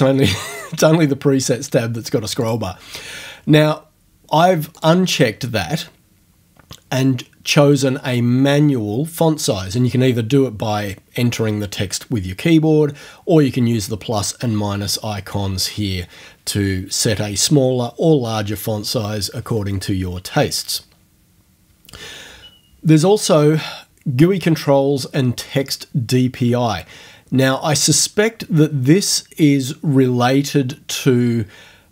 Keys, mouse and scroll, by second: 2.4 click, 2.7-3.4 scroll down 1, 4.8 click, 7.8 click.